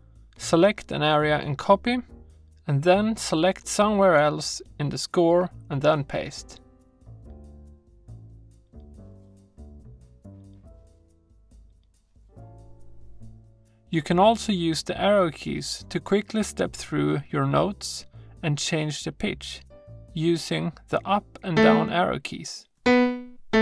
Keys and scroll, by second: 0.5 super+Right, 0.9 super+v, 5.5 super+v, 8.8 super+z, 22.8 Up, 23.3 Right.